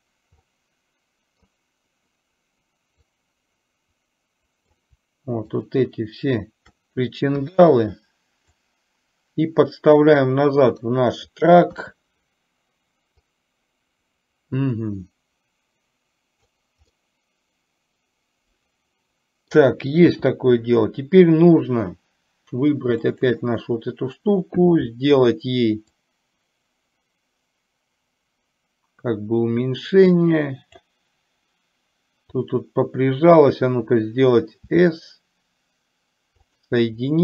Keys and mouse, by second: 0.5-1.5 middle drag, 3.0-4.8 drag, 5.7 shift+click, 8.5-11.5 drag, 13.5-16.5 drag, 17.0-19.5 middle drag, 23.2 click, 26.0 click, 27.2-30.9 drag, 34.8 s.